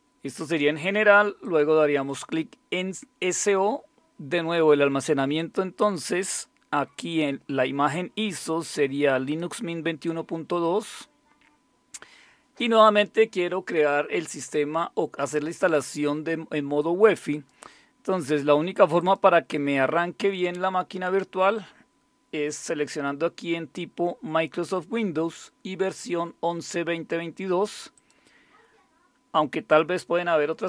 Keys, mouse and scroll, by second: 1.4 click, 5.4 click, 9.2 click, 17.3 click, 19.0 click, 27.9 click.